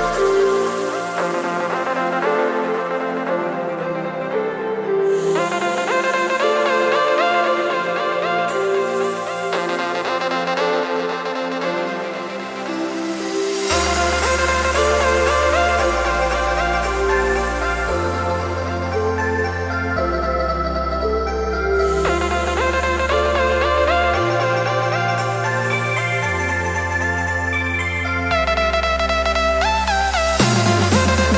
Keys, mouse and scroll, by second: 0.5 click, 1.4 click, 2.7 click, 3.4 click, 4.8 click, 7.9 click, 11.1 click, 16.4-20.9 drag, 21.0-31.3 drag.